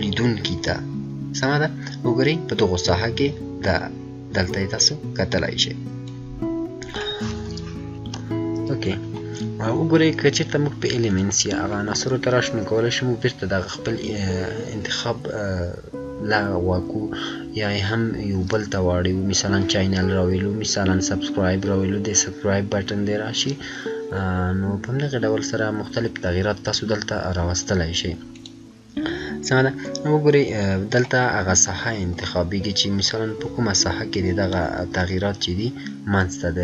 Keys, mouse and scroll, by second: 6.0-7.9 drag, 8.1 F9, 11.0 F9, 11.0 click, 28.3-32.1 drag, 32.1-32.5 scroll down 1.